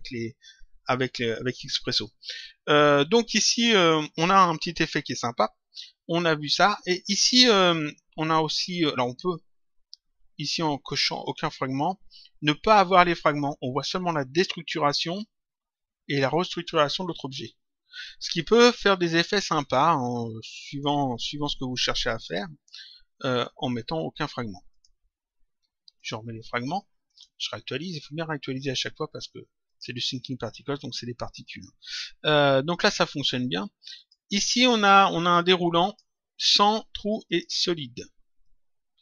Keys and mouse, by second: 4.6 click, 11.2 click, 13.9 click, 20.6 click, 24.7 click, 25.9 click, 27.0 click, 29.6 click, 33.9 click, 35.8 click, 37.2 click, 38.3 click.